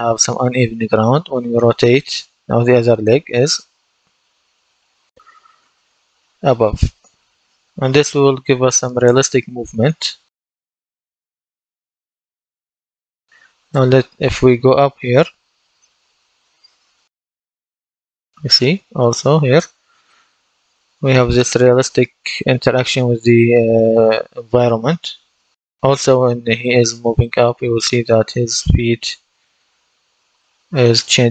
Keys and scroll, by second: 13.0-13.9 typing, 23.9 w, 28.1 a, 29.5 w.